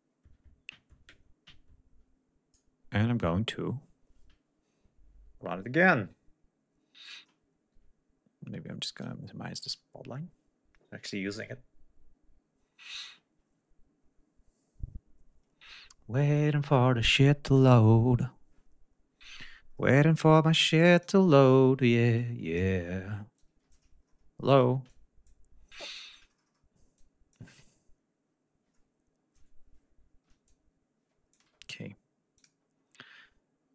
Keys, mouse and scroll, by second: 8.7 click, 20.5 click, 22.0 click, 23.2 click, 24.7 click, 26.7 click, 30.3 click, 32.2 click.